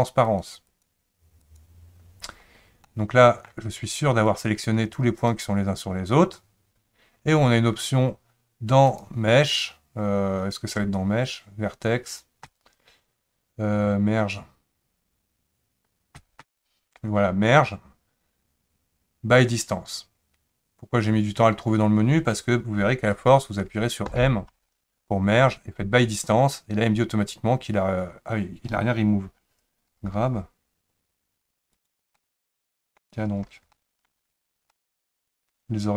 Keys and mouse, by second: 0.7 click, 1.4 click, 2.9 middle click, 4.4 click, 8.9-21.9 drag, 24.1 m, 30.0 g, 32.2 middle click, 33.7 shift+middle click, 34.8-35.9 middle drag.